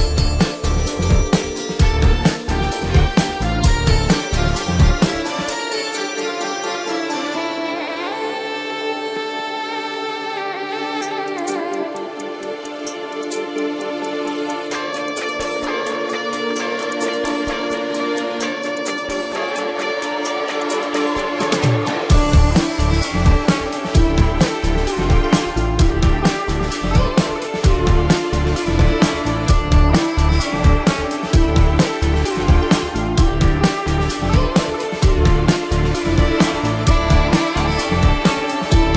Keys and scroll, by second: 0.7 space, 3.6 space, 6.4 space, 6.8 ctrl+alt+z, 7.6 space, 9.8 ctrl+-, 10.1 ctrl+-, 10.2-12.5 typing, 16.4 space, 17.9-21.5 typing, 24.1 space, 25.1 ctrl+=, 25.5 ctrl+=, 25.7 space, 26.8 space, 29.1 space, 29.5 ctrl+=, 29.6 space, 29.8 ctrl+=, 30.7 ctrl+alt+z, 32.4 space, 33.4 space, 33.9 ctrl+=, 34.4 ctrl+=, 34.5 space, 34.7 ctrl+=, 37.2 space, 37.7 space.